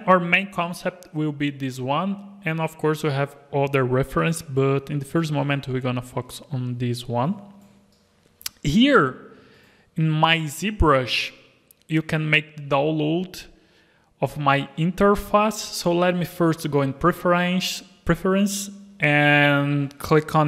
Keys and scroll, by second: 14.5 Tab, 14.9 Tab, 15.5 Tab, 17.3 Tab.